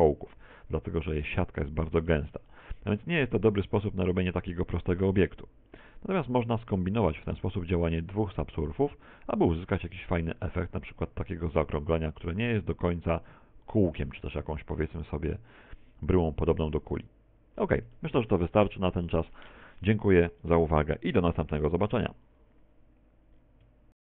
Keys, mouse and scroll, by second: 0.4 z, 1.2 middle click, 2.6 middle click, 3.8-5.0 scroll up 14, 5.7-6.8 scroll down 17, 8.5 click, 8.8 click, 10.0 click, 10.2 click, 10.7 click, 11.4 Tab, 12.0 Tab, 12.2 z, 12.6 middle click, 15.4 click, 17.9 shift+middle click.